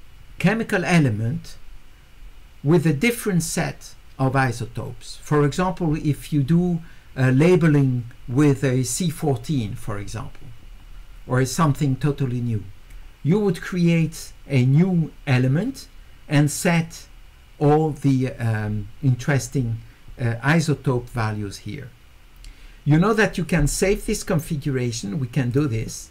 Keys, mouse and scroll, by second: 25.5 click.